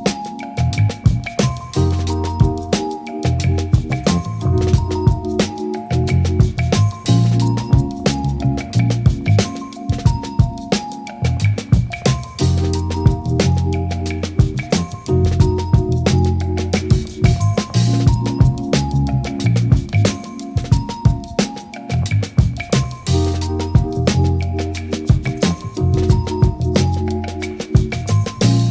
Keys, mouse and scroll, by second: 0.0 shift+click, 0.1 middle click, 0.3 ctrl+click, 0.4 click, 0.5 middle click, 0.6 shift+click, 0.7 shift+click, 0.8 click, 0.9 click, 0.9 f, 1.0 click, 1.0 middle click, 1.2 click, 1.3 click, 1.4 click, 1.6 click, 1.7 middle click, 1.7 shift+click, 1.8 click, 2.1 shift+click, 2.1 middle click, 2.2 click, 2.3 click, 2.4 click, 2.8 click, 2.9 middle click, 2.9 ctrl+click, 3.0 click, 3.1 middle click, 3.2 click, 3.3 click, 3.4 click, 3.5 middle click, 3.6 shift+click, 3.8 click, 3.9 ctrl+click, 4.3 middle click, 4.6 click, 4.8 ctrl+click, 4.9 ctrl+click, 5.0 ctrl+click, 5.1 middle click, 5.4 middle click, 5.5 middle click, 5.6 middle click, 5.7 click, 5.8 ctrl+middle click, 6.0 shift+middle click, 6.2 click, 6.4 click, 6.5 click, 6.6 middle click, 6.7 click, 6.8 click, 6.9 click, 7.0 middle click, 7.0 click, 7.1 middle click, 7.2 click, 7.2 ctrl+KP_7, 7.4 shift+click, 7.6 click, 7.9 shift+click, 8.0 middle click, 8.3 middle click, 8.4 click, 8.7 middle click, 8.9 middle click, 9.1 middle click, 9.3 ctrl+z, 9.3 middle click, 9.4 click, 9.7 click, 9.8 middle click, 9.9 click, 10.1 click, 10.3 middle click, 10.4 click, 10.6 shift+click, 10.8 shift+click, 11.0 ctrl+click, 11.2 click, 11.3 click, 11.3 middle click, 11.5 middle click, 11.6 click, 11.7 middle click, 11.8 click, 11.8 ctrl+z, 11.9 click, 12.2 click, 12.3 f, 12.5 middle click, 12.5 KP_3, 12.6 middle click, 12.8 click, 12.8 ctrl+middle click, 13.0 f, 13.0 click, 13.1 ctrl+z, 13.5 middle click, 13.6 f, 13.7 click, 13.8 ctrl+z, 13.8 click, 13.9 click, 13.9 middle click, 14.2 click, 14.3 middle click, 14.3 ctrl+click, 14.5 ctrl+click, 14.5 middle click, 14.6 ctrl+click, 14.7 middle click, 14.8 click, 15.3 shift+middle click, 15.9 middle click, 15.9 shift+click, 16.2 ctrl+z, 16.2 click, 16.4 middle click, 16.5 click, 16.6 click, 16.6 middle click, 16.7 click, 16.7 ctrl+z, 16.9 ctrl+z, 16.9 click, 17.0 ctrl+middle click, 17.4 click, 17.6 shift+click, 18.3 ctrl+middle click, 18.3 click, 18.3 f, 18.6 click, 18.7 click, 18.8 middle click, 18.9 click, 19.1 shift+click, 19.4 KP_3, 19.5 click, 19.6 click, 19.7 middle click, 19.8 click, 19.9 ctrl+click, 20.1 shift+click, 20.3 ctrl+click, 20.6 middle click, 20.6 ctrl+click, 20.8 middle click, 20.9 click, 21.0 click, 21.0 KP_3, 21.2 click, 21.5 middle click, 21.6 middle click, 21.9 middle click, 22.0 f, 22.2 middle click, 22.4 click, 22.5 click, 22.6 middle click, 22.7 click, 22.7 middle click, 22.8 click, 22.8 middle click, 22.9 ctrl+z, 23.4 click, 23.4 middle click, 23.7 click, 23.9 shift+click, 23.9 middle click, 24.0 middle click, 24.0 click, 24.1 middle click, 24.2 click, 24.4 click, 24.6 click, 24.7 middle click, 24.8 ctrl+click, 25.0 ctrl+middle click, 25.1 middle click, 25.2 click, 25.3 click, 26.2 middle click, 26.3 click, 26.5 middle click, 26.5 ctrl+z, 26.9 click, 27.0 shift+click, 27.1 middle click, 27.2 shift+click, 27.4 click, 27.5 middle click, 27.5 click, 27.6 middle click, 27.7 shift+middle click, 27.7 click, 28.0 f, 28.1 click, 28.3 ctrl+z, 28.5 ctrl+z.